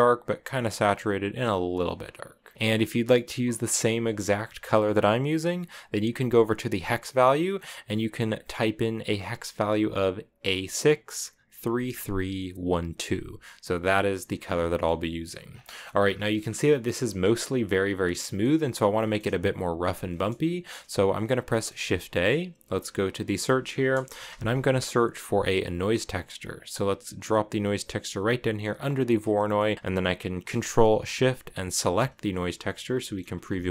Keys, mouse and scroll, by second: 5.1 click, 7.2 middle click, 7.3-8.0 scroll up 5, 8.1-9.1 drag, 14.0 scroll down 2, 14.4 shift+middle click, 14.9-15.3 scroll down 9, 15.3 scroll up 1, 15.4 middle click, 15.8 scroll down 1, 15.8-16.4 scroll up 7, 18.0-18.4 middle drag, 18.4 scroll down 2, 18.7-21.6 shift+middle drag, 21.6 shift+a, 28.5 click, 29.0 scroll up 1, 29.1-31.7 middle drag, 31.7 ctrl+shift+click, 32.7-33.0 shift+middle drag, 33.0-33.7 scroll down 1.